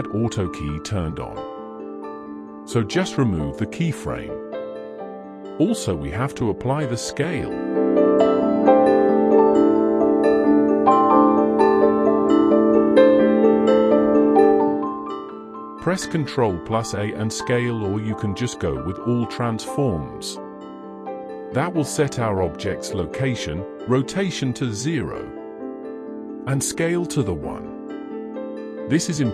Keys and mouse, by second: 1.1 click, 14.4 ctrl+a.